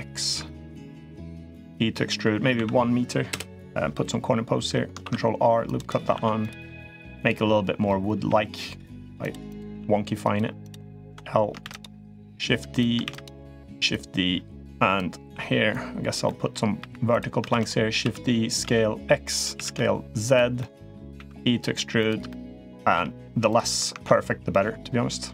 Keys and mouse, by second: 0.0 click, 0.9 e, 4.8 ctrl+r, 6.0 1, 6.2 click, 6.9 click, 8.0 g, 9.2 click, 9.5 g, 10.8 l, 11.4 shift+d, 11.8-12.7 drag, 13.7-14.7 drag, 15.5 click, 16.0 middle drag, 16.6 3, 16.9 click, 17.3 shift+d, 17.8 s, 19.3 s, 20.4 middle click, 20.9 e, 22.0-22.4 middle drag, 22.7 g, 23.7 ctrl+r.